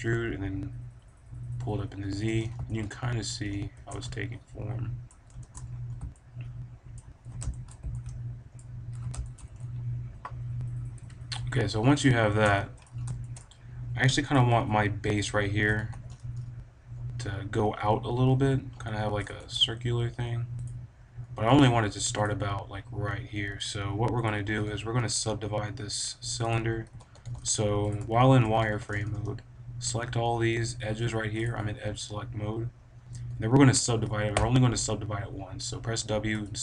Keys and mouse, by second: 2.2 middle drag, 3.0 middle click, 3.7 Tab, 5.4 Tab, 6.0-6.8 middle drag, 10.9 KP_1, 11.0 middle click, 11.3 KP_5, 12.0 z, 12.5-16.2 drag, 15.6 a, 15.8 b, 19.1-21.1 drag, 19.3 s, 20.6 right click, 21.1-23.9 right drag, 21.4 a, 21.6 b, 24.1-25.7 drag, 24.4 b, 26.4 click, 26.8-28.5 typing, 28.2-29.6 right drag, 29.6 click, 31.3-33.2 drag, 34.2 w.